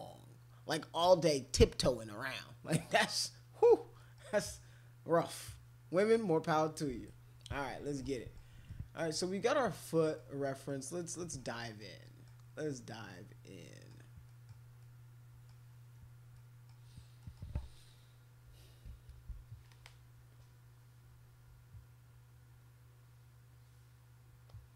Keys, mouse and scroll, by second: 4.0 middle click, 4.3-7.1 right drag, 7.4 middle click, 8.1 middle click, 8.7 middle click, 9.2 middle click, 9.8 middle click, 10.4 middle click, 11.0 middle click, 11.6 middle click, 12.0 middle click, 12.7 middle click, 13.6 middle click, 14.2 middle click, 14.8 middle click, 16.3 middle click, 17.2 middle click, 24.4 click.